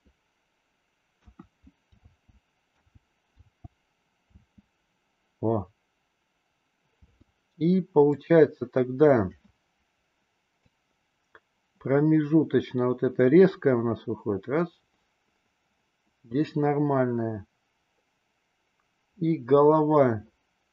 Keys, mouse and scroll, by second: 1.2-4.3 typing, 7.0 space, 8.0 click, 10.7-20.7 drag.